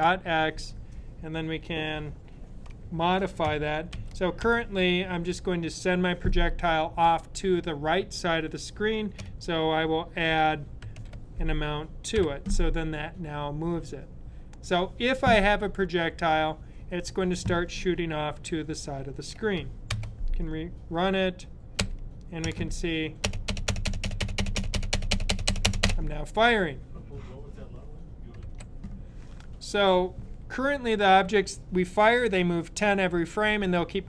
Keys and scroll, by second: 3.8-4.3 typing, 10.6 typing, 12.0 typing.